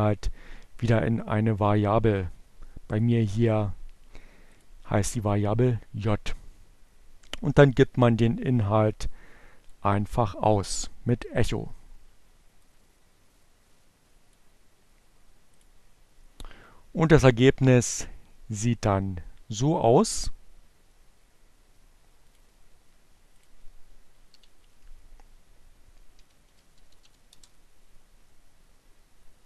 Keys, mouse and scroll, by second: 0.4-2.8 drag, 3.2 click, 7.0-8.7 drag, 10.9-13.9 drag, 14.1-18.1 drag, 18.1 middle click, 21.8 click, 22.7 click, 23.5 shift+7, 24.5 t, 25.8-27.2 typing.